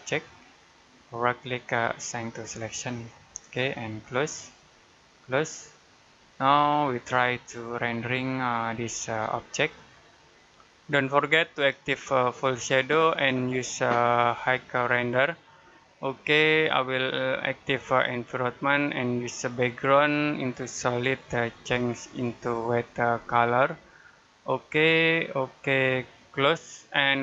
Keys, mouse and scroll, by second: 1.3 right click, 2.2 click, 6.5 shift+middle click, 9.1 middle click, 11.4 click, 18.7 click.